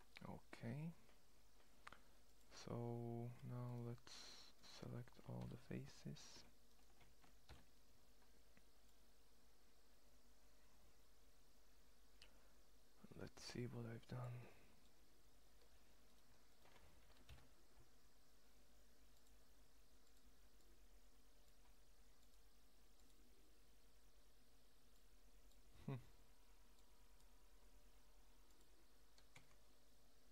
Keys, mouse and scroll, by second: 0.1-1.0 middle drag, 1.9-3.7 drag, 3.7 right drag, 5.1 ctrl+l, 7.1 ctrl+l, 14.8 middle click, 17.0 ctrl+l.